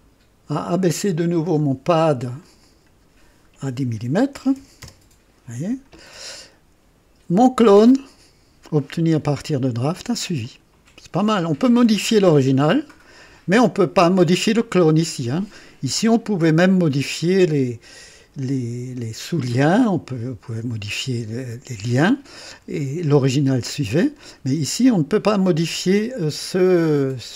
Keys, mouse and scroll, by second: 0.7 scroll up 1, 1.3 scroll up 1, 2.4 click, 4.3 KP_1, 4.5 KP_0, 4.8 Return, 6.3 click, 10.4 click.